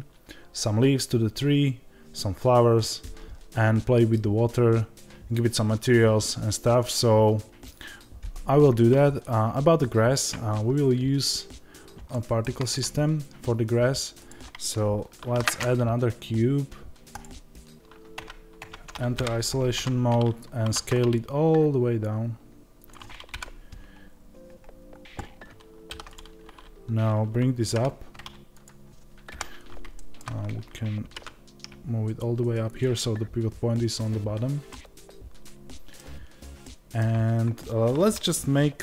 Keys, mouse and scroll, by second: 17.1 shift+a, 19.1 KP_Divide, 19.7 Tab, 20.2-20.6 scroll down 2, 20.6 s, 23.2 KP_Decimal, 23.9-25.8 scroll down 2, 25.8 3, 26.0 click, 26.4-27.6 scroll down 2, 27.6 g, 29.8-38.8 shift+middle drag, 30.2 a, 31.0 g.